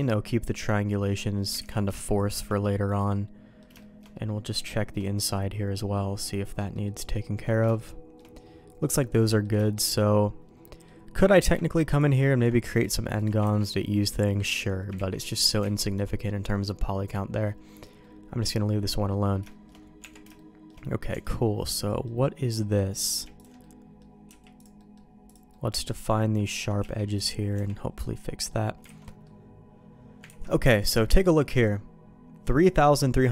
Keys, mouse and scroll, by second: 0.4 middle click, 1.6 alt+a, 1.6 middle click, 2.0 middle click, 2.6 middle click, 3.7 middle click, 4.1 middle click, 4.7 shift+middle click, 5.2 middle click, 6.2-6.5 scroll down 1, 6.5 middle click, 6.8 middle click, 7.1-7.6 scroll down 1, 7.7 shift+middle click, 9.0 middle click, 9.5 shift+middle click, 10.6 middle click, 11.4 Tab, 11.9 click, 13.4 ctrl+x, 13.7 click, 14.9 ctrl+z, 15.2 middle click, 15.7 alt+a, 16.5 middle click, 18.0-19.1 middle drag, 19.4 shift+middle click, 20.0 Tab, 20.3 shift+middle click, 21.1 Tab, 21.5 middle click, 22.9 click, 23.3 click, 23.6 middle click, 24.2 q, 24.7 middle click, 25.2 click, 25.5 middle click, 26.8 q, 27.5 Tab, 28.1 middle click, 28.9 alt+a, 29.0 middle click, 30.3 ctrl+s, 30.7 click, 31.0 middle click.